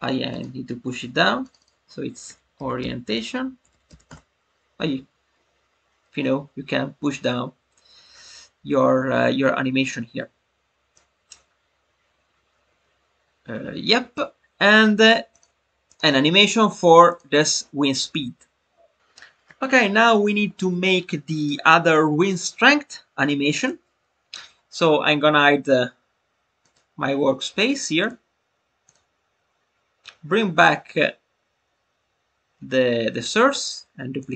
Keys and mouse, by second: 0.3 click, 1.4 click, 1.5-4.9 drag, 10.9-14.2 drag, 15.3 click, 15.8 click, 16.3 click, 17.0 click, 26.5 click, 28.8 click, 33.5 right click.